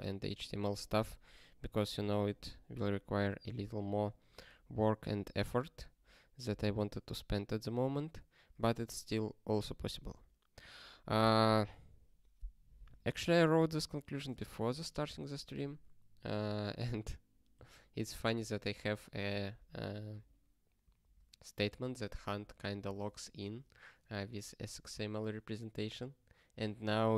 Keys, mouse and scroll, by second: 10.0 ctrl+n, 16.1 ctrl+space, 16.3 ctrl+n, 17.5 ctrl+g, 18.1 ctrl+space, 21.0 ctrl+space, 21.1 ctrl+e, 21.6 ctrl+g.